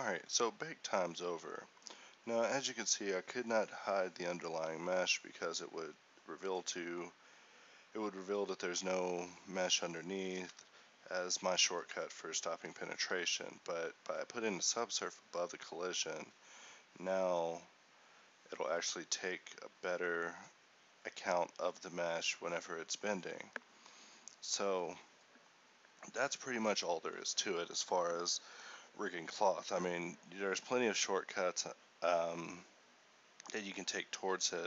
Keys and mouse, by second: 3.5 a, 10.1 a, 11.2 a, 13.7 alt+a.